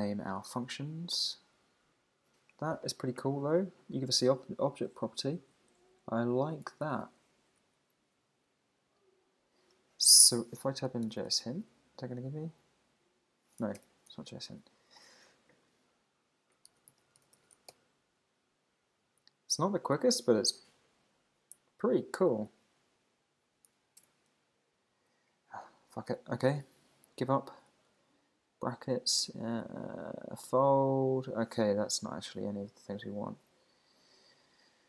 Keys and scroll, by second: 0.1 Down, 1.3 Up, 6.8 Down, 13.8 alt+BackSpace, 25.3 Down, 30.4 Down, 31.5 Page_Up.